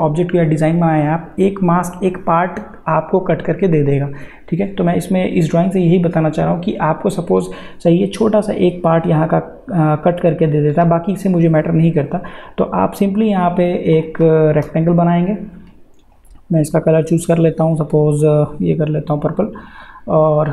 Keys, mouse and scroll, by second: 13.9 click, 14.6 m, 16.9-20.5 drag.